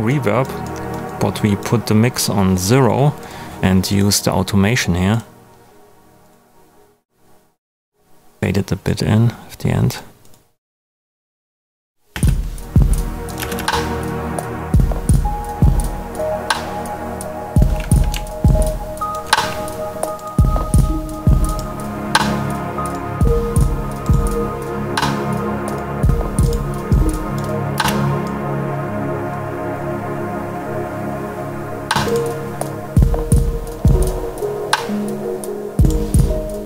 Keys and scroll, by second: 12.1 space, 13.3 space, 27.7 space, 31.7 space.